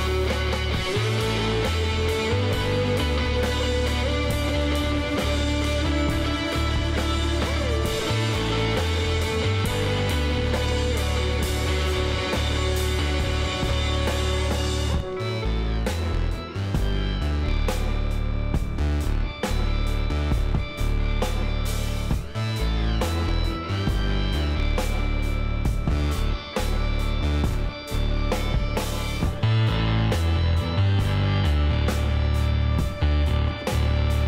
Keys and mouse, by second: 4.1 ctrl+z, 4.9 b, 5.9-7.2 drag, 6.5 e, 8.4 e, 10.2-11.9 drag, 11.0 b, 12.5 e, 15.1-16.8 drag, 15.9 b, 18.2 Tab, 18.8 middle click, 19.1 z, 20.5-22.4 middle drag, 22.6-25.2 middle drag, 22.9 Tab, 25.2-30.2 drag, 31.9-33.1 middle drag, 34.1-34.2 drag.